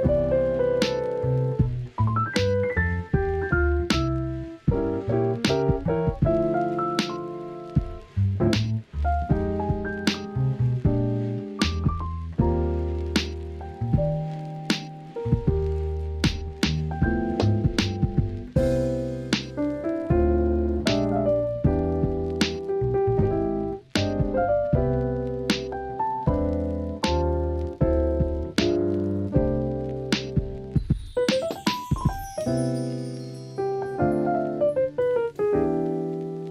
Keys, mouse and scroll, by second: 1.7 click, 2.2 Tab, 2.6 middle click, 3.4 KP_1, 5.6 click, 7.7 click, 8.9-9.4 drag, 9.7 click, 11.7 click, 12.9 ctrl+s, 13.3 alt+z, 17.2-17.9 middle drag, 18.4 click, 18.7 middle click, 19.7 KP_3, 21.0 alt+z, 21.4 alt+z, 21.8 click, 22.6 click, 24.2 scroll up 1, 24.2 middle click, 24.8 scroll down 1, 25.1-25.5 scroll up 1, 25.5-26.0 scroll down 1, 26.0 KP_7, 26.8 shift+middle click, 27.3 alt+z, 27.6 shift+middle drag, 28.9 r, 30.0-30.5 drag, 31.7 scroll up 1, 31.7-32.5 middle drag, 32.7 middle click, 32.9-33.7 scroll down 1, 33.7 scroll down 1, 33.9 middle drag, 33.9 scroll up 1, 34.1 scroll down 1, 34.2 alt+z, 34.7-35.1 middle drag, 34.7 scroll up 1, 35.6-36.5 middle drag, 35.6 scroll up 1.